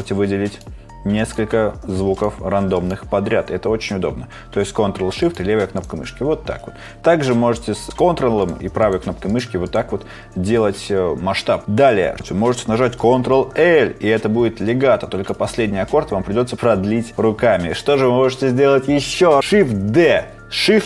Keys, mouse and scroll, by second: 7.9 right click, 13.5 ctrl+l, 19.8 shift+d.